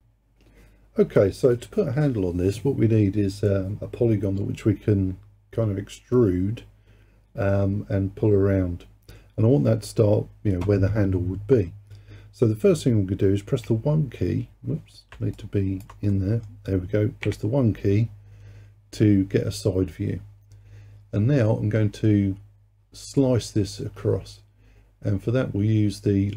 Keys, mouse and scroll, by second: 15.4 alt+click, 16.1-17.3 middle drag, 17.3 KP_1.